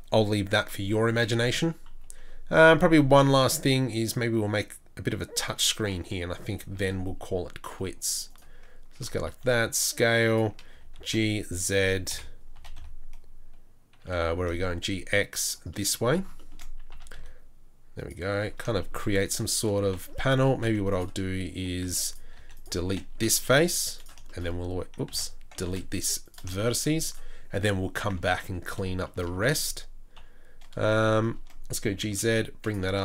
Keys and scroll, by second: 1.9 KP_3, 6.7 shift+a, 9.0 Tab, 9.3 s, 10.7 g, 12.1 KP_7, 12.7 g, 16.9 s, 20.6 z, 21.8 z, 22.4 3, 23.1 Delete, 25.1 ctrl+z, 25.7 Delete, 28.3 1, 29.3 a, 30.2 KP_3, 31.8 g.